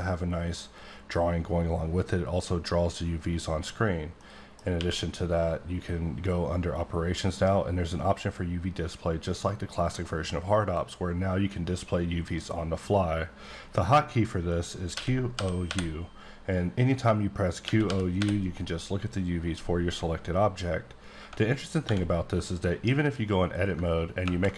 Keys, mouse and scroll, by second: 3.6-4.2 scroll up 3, 4.2 middle click, 4.6 scroll down 1, 4.7 q, 10.5 click, 14.9-15.7 typing, 17.6-18.2 typing, 20.7 typing, 20.9 scroll up 1, 21.2 Tab, 21.4 scroll down 2, 21.8 1, 22.5 click, 24.2 ctrl+KP_Add.